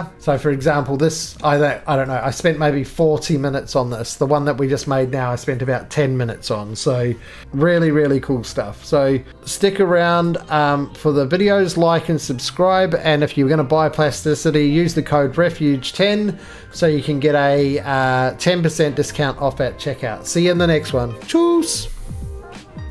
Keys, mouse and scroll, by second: 0.2 click, 0.2 middle click, 0.2-1.2 scroll, 1.2 right click, 1.5-2.1 scroll, 2.1 middle click, 2.2-2.6 scroll, 2.5 shift+middle click, 2.9 shift+middle click, 2.9-3.7 scroll up 14, 3.7 middle click, 5.0 middle click, 5.1-6.4 scroll, 6.4 scroll, 9.3 scroll, 9.4 middle click, 9.6 right click, 9.7 middle click, 10.3 click, 11.4 middle click, 13.7 middle click, 13.8 middle click, 15.5 middle click, 15.6 middle click, 16.7 shift+middle click, 17.9 shift+middle click, 18.4 middle click.